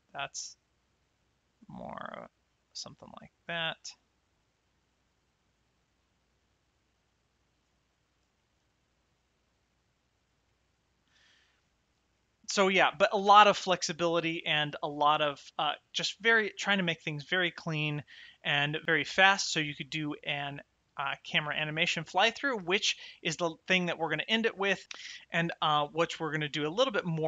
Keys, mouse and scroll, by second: 8.3 shift+middle click, 10.4 shift+middle click, 12.0 shift+middle click, 21.1 click, 22.7 shift+right click, 25.0 middle click, 26.6 shift+middle click.